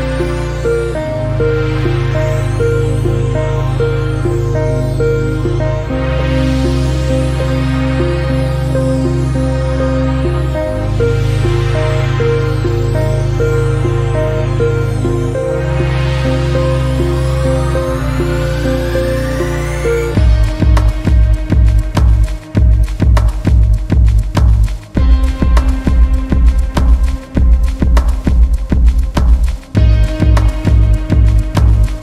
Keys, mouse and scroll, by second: 0.4 s, 3.5-4.1 scroll down 1, 4.1 scroll down 1, 4.4 Tab, 5.1 click, 7.6-9.3 scroll up 3, 9.3 alt+z, 9.6 click, 10.4 z, 13.9 click, 15.7-16.4 scroll down 1, 16.4 click, 17.1 alt+z, 17.7 click, 19.3 e, 22.4 Tab, 23.4 drag, 26.6 Tab, 28.5 alt+z, 28.8 alt+z, 29.1 click, 30.1 click.